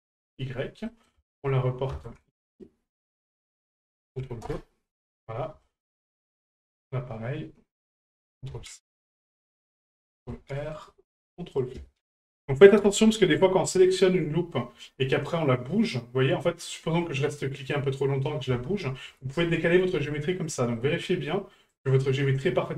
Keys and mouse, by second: 0.8 middle click, 3.3-4.5 drag, 4.9 middle click, 5.6 shift+middle click, 6.0 middle click, 6.8 right click, 7.9-9.0 ctrl+drag, 9.1 middle click, 11.7-12.9 ctrl+drag, 13.9 right click, 15.2-18.3 right drag, 20.8 middle click, 21.7 right click.